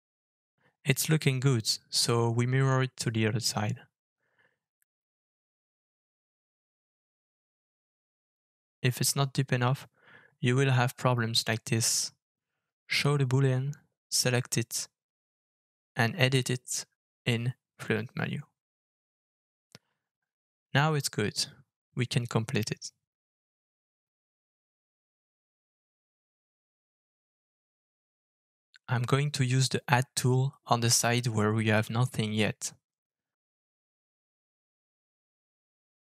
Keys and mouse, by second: 3.4-7.4 drag, 10.1 middle click, 11.1-11.5 middle drag, 11.7 shift+middle drag, 15.2 click, 16.3 alt+f, 24.2-24.6 middle drag, 24.8-25.2 shift+middle drag, 25.6-26.4 middle drag, 27.4-28.5 middle drag, 28.7 click, 29.9 alt+f, 34.7-36.0 middle drag.